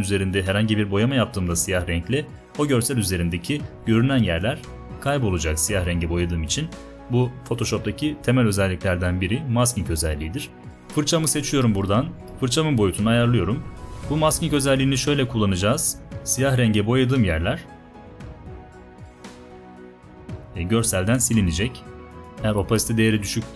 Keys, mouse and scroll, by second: 11.2 b, 12.4 right click, 16.0 right click.